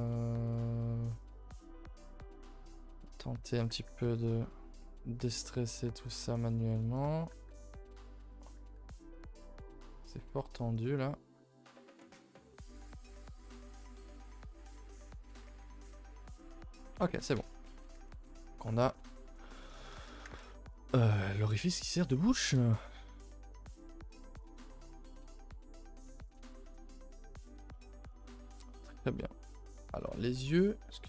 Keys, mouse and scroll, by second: 0.2 middle click, 1.2 click, 1.6 middle click, 2.1 click, 2.3 middle click, 2.6 g, 3.4 click, 4.4 middle click, 5.2 click, 6.3 middle click, 6.9 click, 7.2 g, 8.3 click, 8.5 g, 9.4-9.9 middle drag, 9.9 click, 10.1 g, 11.0-11.3 middle drag, 11.8-13.0 middle drag, 13.0 click, 13.3 middle click, 13.5-13.8 scroll up 1, 13.8 g, 14.6 click, 14.8 g, 15.8 click, 16.1-17.8 typing, 16.9 scroll down 4, 17.1 ctrl+s, 17.3 Tab, 17.5 middle click, 17.9 scroll down 3, 18.1 ctrl+s, 18.3 middle drag, 18.5-18.8 scroll up 2, 18.8 click, 19.6 click, 19.9 a, 20.0 a, 20.2 scroll down 1, 20.4 ctrl+s, 20.5-21.0 middle drag, 21.0-21.9 scroll up 4, 21.2-21.5 middle drag, 21.9-22.4 scroll down 1, 22.4 KP_0, 25.5-25.9 scroll down 2, 26.0 Tab, 26.6 a, 26.7 a, 27.1 ctrl+s, 27.3-27.7 scroll down 2, 27.7 shift+middle click, 28.2 scroll up 4, 28.8 middle click.